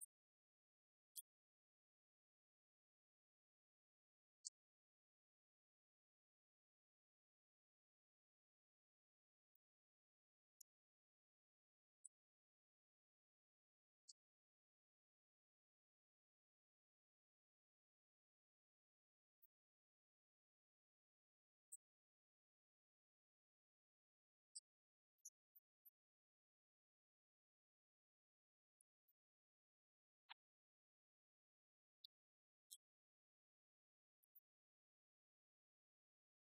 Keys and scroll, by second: 0.3-2.7 typing, 2.9 Left, 3.5 Right, 3.8 shift+Left, 4.4 shift+Down, 5.1 ctrl+d, 5.4 Right, 6.6 Left, 7.8 Right, 8.6 ctrl+Right, 9.9 Left, 12.1 Right, 13.3 Left, 15.1 Right, 16.1 shift+Down, 18.0 Delete, 18.7 Right, 19.4 ctrl+Right, 21.5 ctrl+Left, 23.4 ctrl+s.